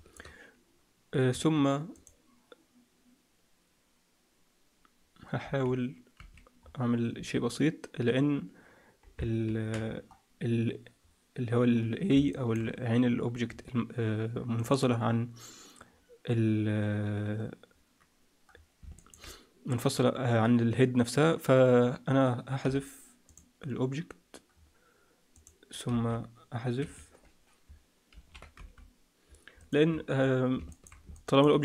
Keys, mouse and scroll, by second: 1.3 Tab, 1.9 click, 5.3 z, 6.1 z, 6.5-7.1 scroll up 3, 7.1 scroll up 2, 7.1 z, 9.4 ctrl+l, 9.7-10.9 scroll down 4, 10.9-12.0 scroll up 3, 12.2 shift+middle click, 13.5-14.1 scroll down 1, 17.1-18.0 scroll down 2, 17.6-18.4 scroll up 2, 18.4-18.9 scroll down 2, 18.9 shift+middle click, 21.7-22.5 scroll up 2, 22.5 x, 24.5-25.3 scroll up 2, 25.3 click, 25.8 x, 28.1 ctrl+l, 28.5 x, 29.8 Tab, 30.1-30.4 scroll down 4, 30.6 shift+middle click, 31.1 middle click.